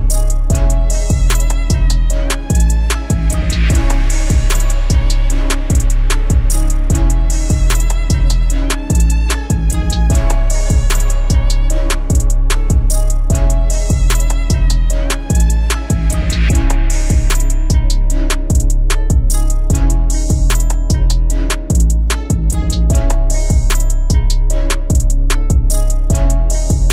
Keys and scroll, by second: 16.4 ctrl+d.